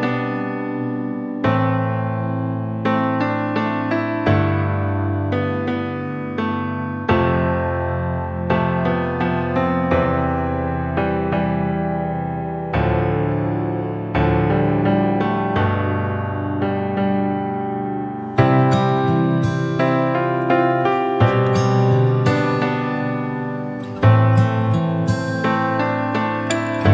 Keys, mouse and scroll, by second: 0.4 click, 0.6-1.6 middle drag, 1.6 click, 1.8-2.4 scroll up 3, 2.4 click, 3.3 click, 3.9 scroll down 2, 4.0-4.4 middle drag, 4.6-5.1 middle drag, 5.1 scroll up 1, 5.4-5.8 shift+middle drag, 5.8 click, 6.0 scroll down 1, 6.2-8.1 middle drag, 8.1 scroll up 1, 8.3-9.6 middle drag, 9.6 drag, 9.9 Tab, 10.1-10.7 scroll up 3, 10.7 middle click, 11.2 alt+z, 11.5 click, 11.9 click, 12.4 scroll down 1, 12.7 shift+middle click, 13.7 KP_1, 14.2 KP_3, 15.0 Tab, 15.3-15.7 scroll up 2, 15.7-16.2 shift+middle drag, 16.2 Tab, 16.4 scroll down 1, 16.6-19.7 middle drag, 20.7-22.2 drag, 22.2 middle click, 23.1 KP_1, 23.4 KP_3, 24.2 click, 26.7 Tab.